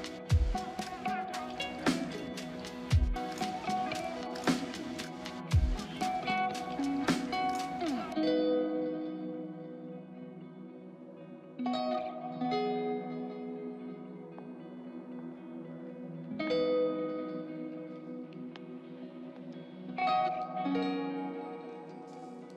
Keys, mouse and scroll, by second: 1.6 right click, 7.2 right click, 16.5 right click, 19.5 double click, 20.0 right click.